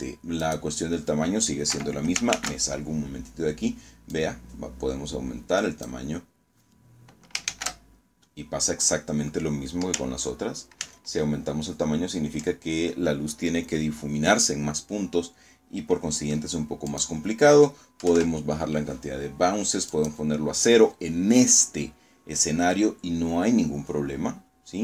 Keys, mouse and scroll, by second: 0.6 Escape, 1.2 shift+z, 3.0-4.9 drag, 6.4 shift+z, 9.7 ctrl+z, 15.8 click, 16.9 KP_1, 17.0 KP_Enter, 18.8 click, 22.7-23.0 scroll down 1, 24.0-24.3 scroll up 2.